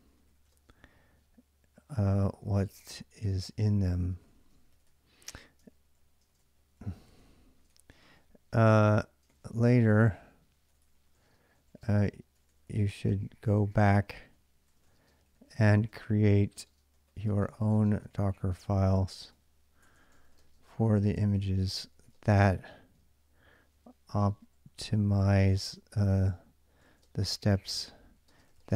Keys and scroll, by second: 0.0-0.7 typing, 1.8-28.7 typing.